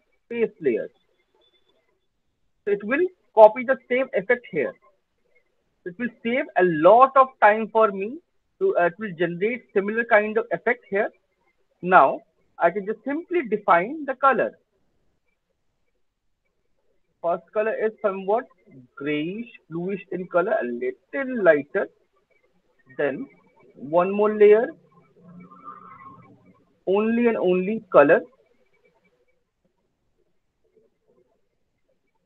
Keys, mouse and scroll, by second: 0.5 click, 2.7 alt+middle click, 2.9 alt+right click, 5.1 alt+click, 5.5 alt+click, 6.0 alt+middle click, 8.1 alt+click, 8.5 alt+middle click, 10.3 alt+middle click, 11.0 alt+middle click, 11.3 alt+click, 11.7-13.1 alt+middle click, 12.5-12.9 scroll down 7, 12.9 middle click, 14.8 click, 16.0 click, 19.6 click, 22.2 click, 24.0 click, 26.8 click, 27.0 click, 27.6 click, 27.8 click, 28.9 click, 31.6 click.